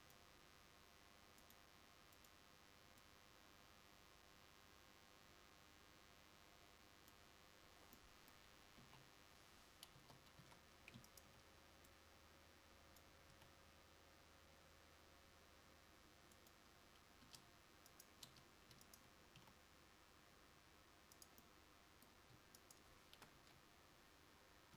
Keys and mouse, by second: 8.9 KP_1, 10.1 Tab, 10.5 a, 13.5 s, 17.3 Tab, 19.5 s, 23.5 KP_1.